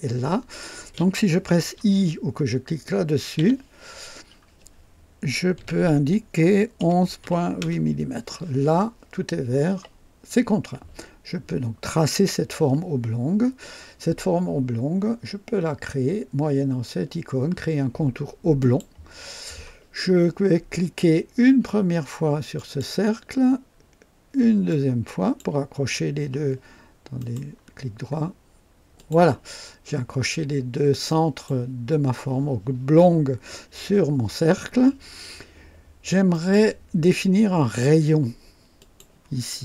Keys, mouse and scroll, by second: 3.4 i, 5.6-8.3 typing, 18.6 click, 20.5 scroll up 2, 22.5 click, 24.7 click, 27.2 right click, 28.9 click, 30.3-31.0 scroll up 2, 31.1 right click, 36.3 right click, 38.8 click.